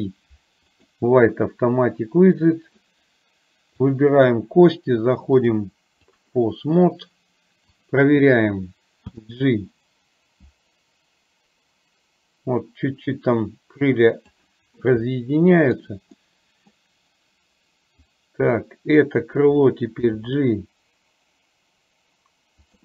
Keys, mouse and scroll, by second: 3.9 click, 5.5-6.3 drag, 7.9 click, 9.3 g, 15.2 middle click, 16.3 middle click, 18.2 click, 18.7 middle click, 20.2 g.